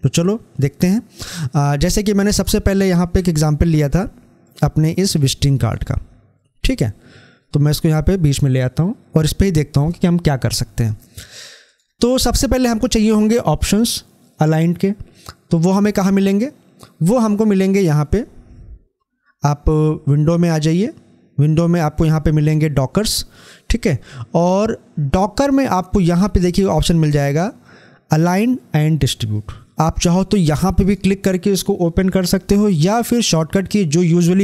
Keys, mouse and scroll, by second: 1.7-11.5 drag, 11.5 click, 17.9 click, 30.6 click.